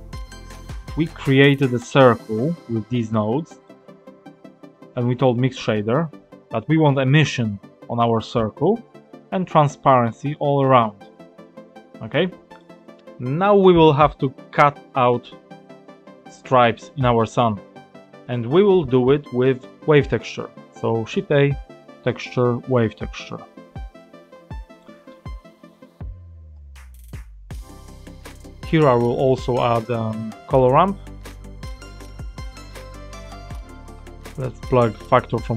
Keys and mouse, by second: 0.5 click, 3.7-4.8 drag, 12.6 click, 17.7 click, 20.5 shift+a, 24.7 click, 26.5-28.2 drag, 29.1-29.8 drag, 30.1 shift+a, 34.1 click, 35.4-35.5 drag.